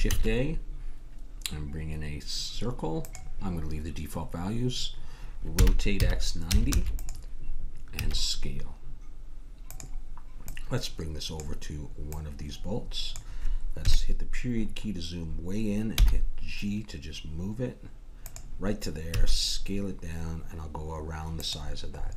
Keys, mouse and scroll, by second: 0.1 shift+a, 5.5 r, 7.9 s, 10.5-13.8 drag, 13.8 KP_Decimal, 14.6-16.7 middle drag, 16.0 g, 19.1 s, 22.0-22.1 middle drag.